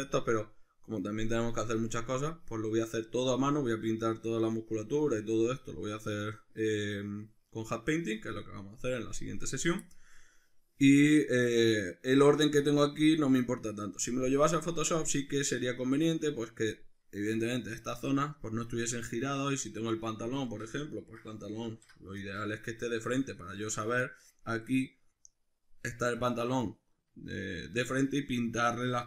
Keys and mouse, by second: 15.6 right click, 20.2-26.6 middle drag, 21.7 alt+q, 26.6 right click, 27.5 right click.